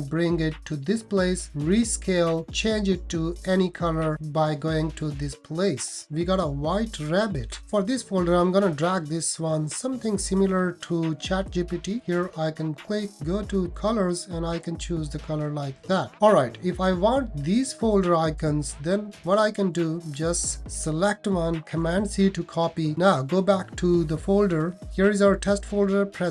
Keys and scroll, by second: 21.7 super+c.